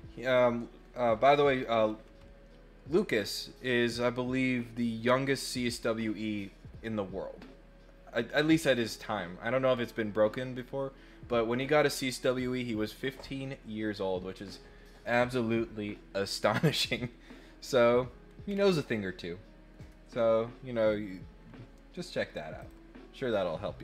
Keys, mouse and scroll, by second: 18.4 scroll down 2, 22.6 click.